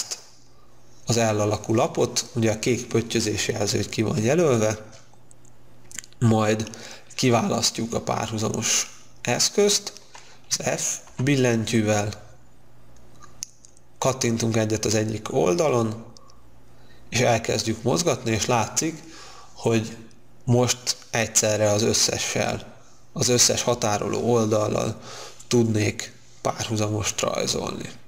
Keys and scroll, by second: 11.2 f.